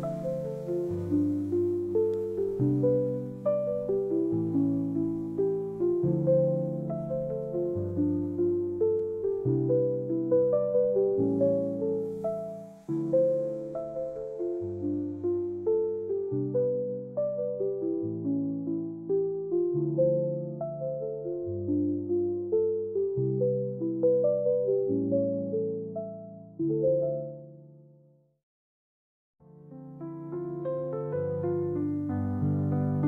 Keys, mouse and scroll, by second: 1.0 click, 2.1 click, 3.6 space, 4.0 click, 4.9 click, 5.9 click, 7.4 Tab, 8.7 click, 9.0 click, 10.8 a, 11.1 a, 12.6 click, 14.3-16.2 drag, 17.9 click, 18.4 click, 18.6 click, 18.9 click, 19.4 Tab, 20.5 space, 21.2 space, 21.6 space, 22.5 click, 23.1 space, 23.6 drag, 25.2 click, 26.2 click, 26.8 click, 28.7 click, 30.2 space, 31.6-32.2 alt+drag.